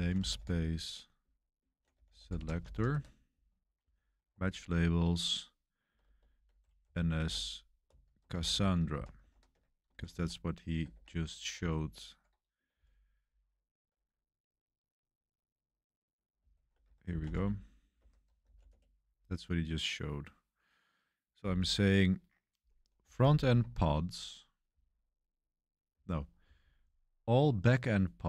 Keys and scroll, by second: 0.0-5.9 typing, 7.1-12.7 typing, 10.9 Escape, 16.3-19.0 typing, 17.9 Escape, 22.9-26.7 typing.